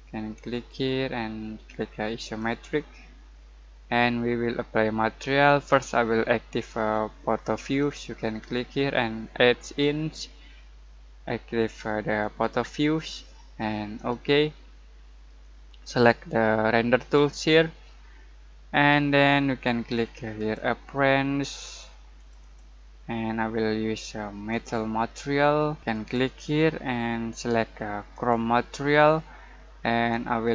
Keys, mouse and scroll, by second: 0.0-0.5 typing, 0.5 click, 7.5 click, 8.5 typing, 12.1 click, 16.9 click, 20.3 click, 20.3 typing, 20.3 click, 25.9 click, 25.9 typing.